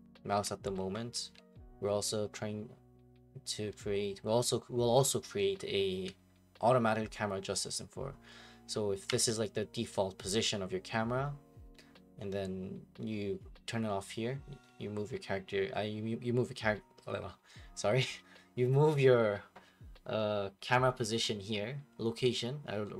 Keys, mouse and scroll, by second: 0.0-5.7 typing, 9.0 w.